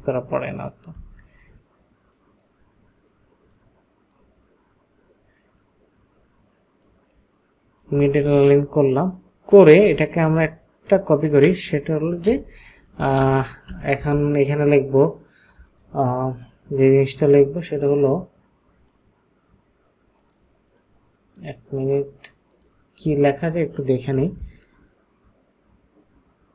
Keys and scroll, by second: 12.3 t, 13.2 ctrl+a.